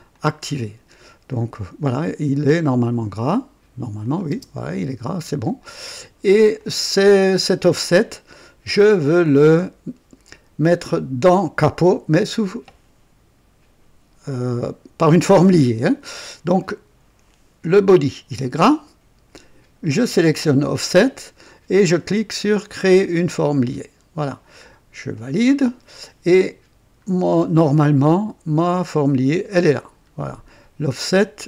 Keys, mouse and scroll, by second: 0.1 click, 1.2 click, 2.8 click, 4.0 click, 4.3 space, 5.4 click, 6.5-7.4 drag, 20.1 click, 23.5 click, 25.1 click, 27.0 scroll up 2, 29.8 scroll down 2, 30.9 click.